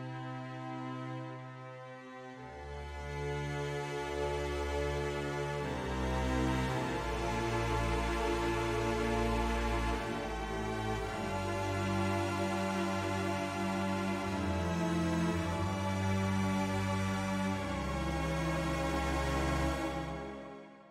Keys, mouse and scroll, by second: 0.1 click, 1.5 e, 2.0 s, 4.1 click, 4.8 click, 5.7 e, 6.0 s, 8.5 click, 9.9 e, 10.2 s, 11.1 click, 11.7 click, 12.4 e, 12.7 s, 14.4 click, 15.0 middle click, 17.2 click, 18.3 ctrl+z, 18.9 middle click, 20.1 click.